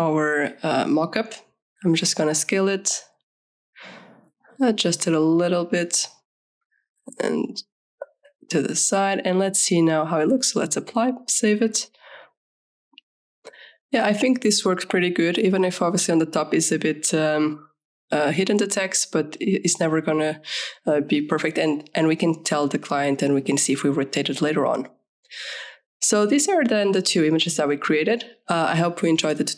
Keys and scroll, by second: 1.6 ctrl+v, 2.5 ctrl+t, 7.6 ctrl+z, 10.6 ctrl+s.